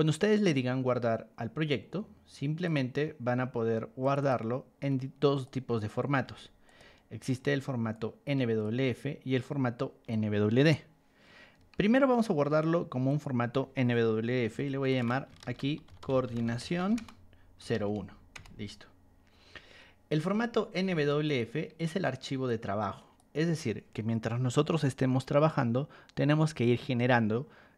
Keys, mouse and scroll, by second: 0.3 click, 2.6 click, 4.0 click, 4.2 click, 5.3 click, 5.7 click, 6.2 ctrl+1, 6.6 click, 7.9 ctrl+click, 9.4 ctrl+click, 11.5 Escape, 13.0 click, 15.2-17.7 typing, 18.3 Return, 20.8 ctrl+1, 21.2 click, 22.4 ctrl+click.